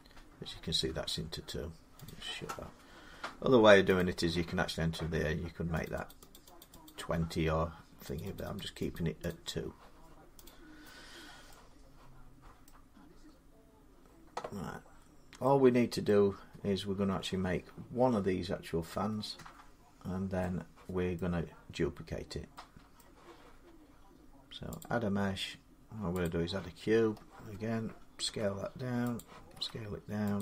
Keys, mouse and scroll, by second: 1.8 click, 3.8 click, 5.6 click, 5.9 click, 6.1 click, 6.5 click, 6.6 click, 7.9 click, 8.1 click, 8.4 click, 8.7 click, 9.1 click, 10.2 click, 11.0 scroll down 3, 12.4 middle click, 12.9 scroll up 2, 14.5-14.9 scroll down 3, 15.2 scroll up 2, 15.9 middle click, 19.7 middle click, 21.0 middle click, 22.8 middle click, 24.6 click, 26.1 click, 26.5-27.0 scroll down 10, 28.0 s, 28.2 scroll, 28.9 click, 29.3 s, 30.2 click.